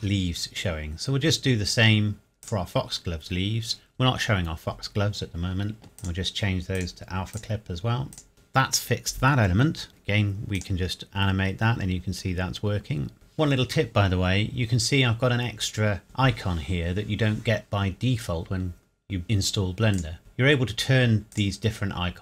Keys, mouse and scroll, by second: 1.7-2.5 scroll up 1, 2.5 click, 6.0 click, 10.5 click, 13.1 scroll up 1, 19.9 click.